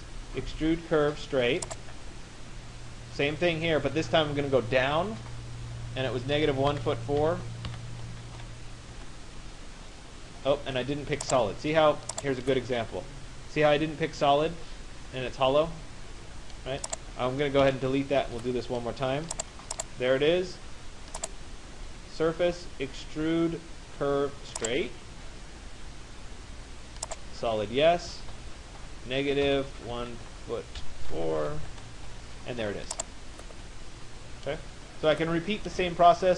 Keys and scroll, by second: 6.0 -, 6.7 -, 7.7 4, 8.9 Return, 17.2 Delete, 31.2 Return, 32.4 Return.